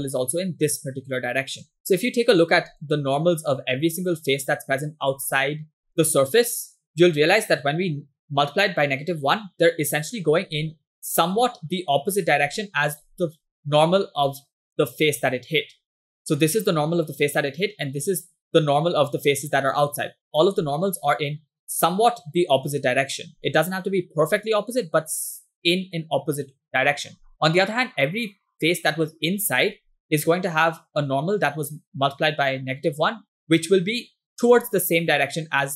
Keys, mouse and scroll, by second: 0.2 click, 0.8 click, 1.5 click, 10.6 click, 11.1 click, 12.5 click, 13.0 click, 20.6 click, 21.6 click.